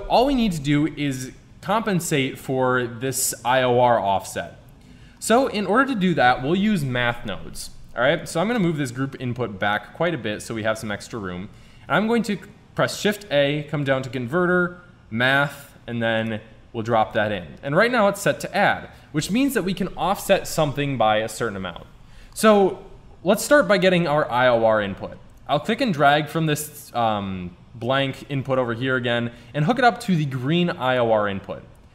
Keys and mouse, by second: 4.1-5.2 middle drag, 8.2 click, 11.8 shift+a, 24.4 middle click.